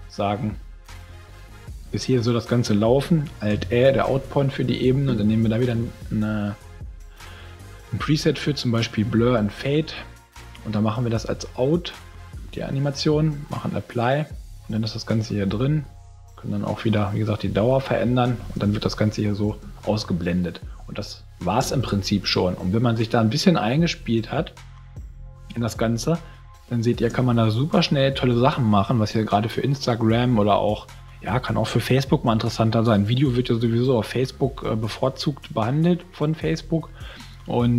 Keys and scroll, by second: 3.5 alt+a, 18.4 space, 21.6 space, 27.1 space.